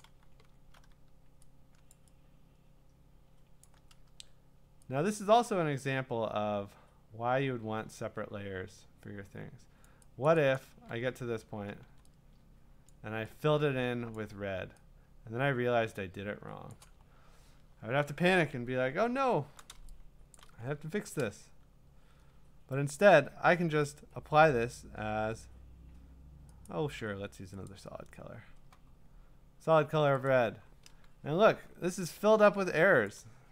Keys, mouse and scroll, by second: 0.6 scroll, 1.9 click, 3.6 click, 9.8 click, 10.3 click, 10.6 click, 11.8 x, 12.9 click, 14.2 click, 16.7 click, 17.0-17.9 scroll, 18.7-19.4 scroll, 20.3 click, 20.8 scroll, 21.4 q, 26.7 click, 27.7 click, 30.3 click, 31.6-32.3 scroll, 33.1 click.